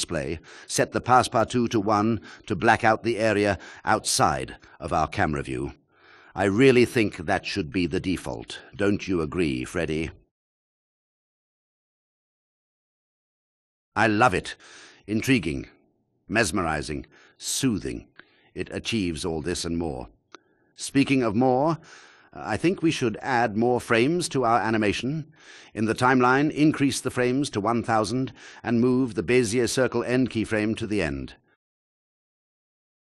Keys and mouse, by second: 0.3 click, 1.4 click, 2.5 drag, 13.5 g, 14.9 x, 26.7 space, 28.2-31.7 drag, 30.7 KP_0.